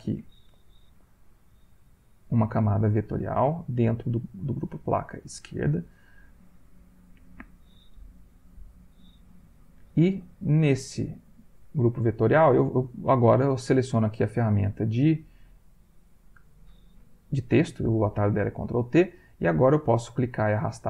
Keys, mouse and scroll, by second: 0.9 ctrl+z, 1.8 click, 2.8 click, 3.9 click, 5.8 click, 10.9 click, 19.7 click.